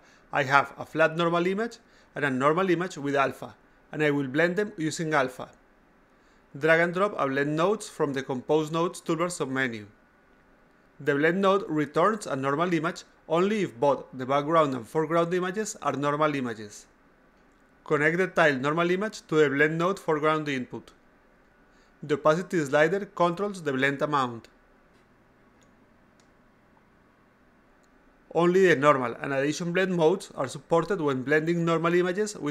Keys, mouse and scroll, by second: 1.1 click, 2.9 click, 3.1 click, 7.8 click, 8.5-10.0 drag, 10.5-11.7 drag, 18.8-20.1 drag, 22.1-28.6 drag, 29.2 click, 30.0-30.6 drag, 31.2 click.